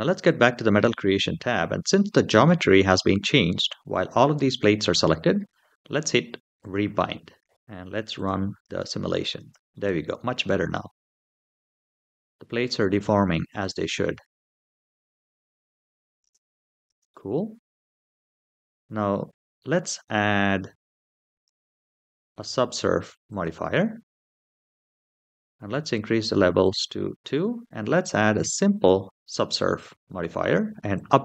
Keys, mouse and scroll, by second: 0.1 click, 2.2-2.7 middle drag, 6.4 click, 7.5 shift+middle click, 7.5-7.9 scroll down 2, 7.9 click, 8.4 space, 9.1 space, 9.5-14.8 middle drag, 15.6 click, 16.0 space, 16.6 space, 16.9-18.3 middle drag, 19.9-21.1 scroll down 2, 21.1-23.3 drag, 24.5-26.3 scroll down 3, 26.4 click, 28.3 click, 30.7 click.